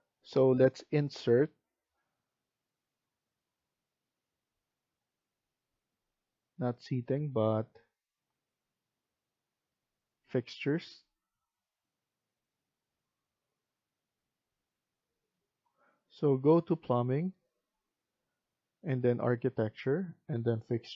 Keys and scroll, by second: 15.5 F1.